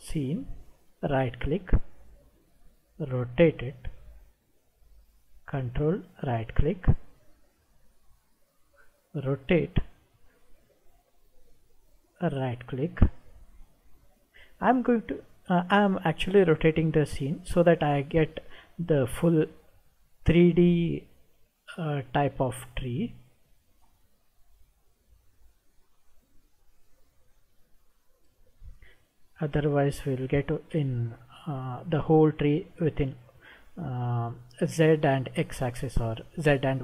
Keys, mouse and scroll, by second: 0.8 ctrl+right click, 2.4-3.6 middle drag, 6.0 ctrl+right click, 7.3-10.2 middle drag, 12.3 ctrl+right click, 13.9-16.8 middle drag, 18.1-19.3 middle drag, 21.4 ctrl+right click, 24.3-26.1 middle drag, 27.4 ctrl+right click, 28.9-31.9 middle drag, 36.5 ctrl+right click.